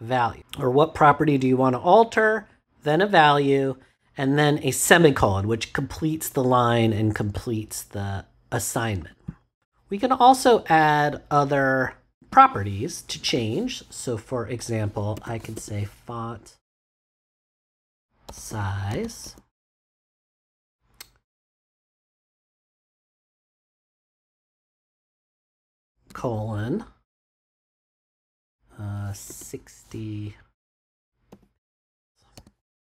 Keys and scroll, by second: 12.2 space, 14.9-16.0 typing, 17.4-19.6 typing, 26.0 shift+;, 29.2 6, 30.8 0, 31.2 p, 32.3 x.